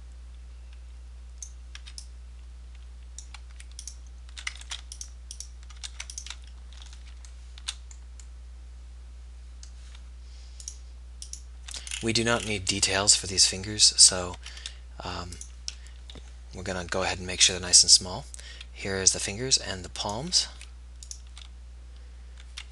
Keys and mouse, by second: 4.1 b, 5.0 ctrl+z, 15.3 g, 17.3 a.